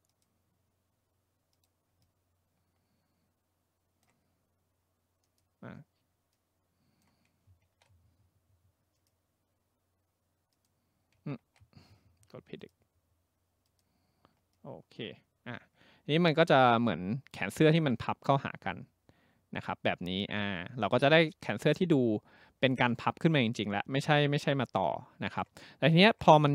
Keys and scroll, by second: 7.7 ctrl+z, 11.4 ctrl+z.